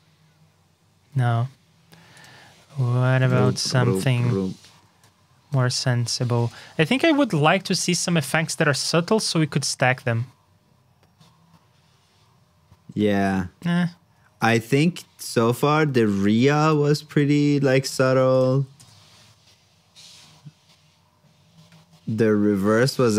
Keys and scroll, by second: 5.7 super+c, 6.2 super+v, 18.0 super+c, 18.5 super+v.